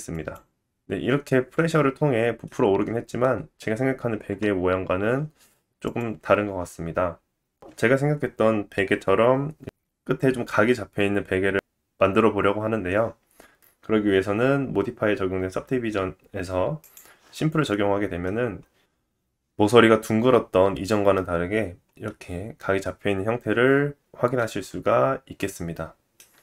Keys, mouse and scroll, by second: 0.0 scroll up 2, 0.1 middle click, 1.7-2.4 scroll down 1, 2.4 middle click, 5.8-13.1 drag, 5.8-7.8 middle drag, 5.8-7.8 right drag, 9.9 shift+middle click, 10.4 middle click, 11.0-13.1 scroll up 1, 13.1 scroll up 2, 13.3 scroll down 1, 16.7 click, 17.6 middle click, 18.3 scroll up 2, 18.9 middle click, 20.0-20.6 scroll up 1, 21.4 middle click, 22.0 scroll down 1, 22.2 middle click, 24.4-26.4 drag, 24.8 space, 25.5 space, 25.9 middle click.